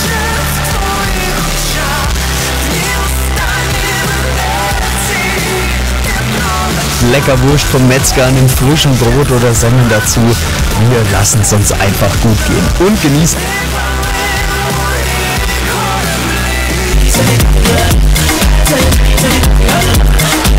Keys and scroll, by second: 13.2 Page_Down.